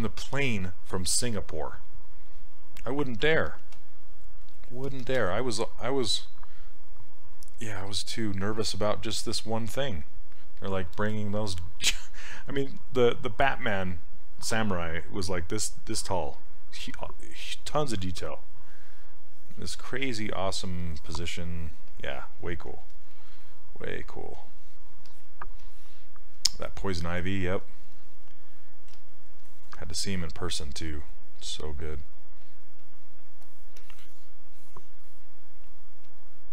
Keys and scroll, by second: 28.9 s.